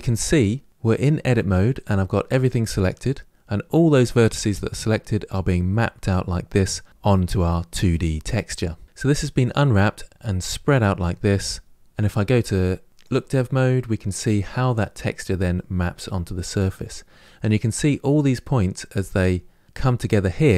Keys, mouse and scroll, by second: 0.7 scroll up 5, 12.9 click, 13.5-14.0 scroll up 4, 15.6 middle click, 16.6-18.4 scroll up 3.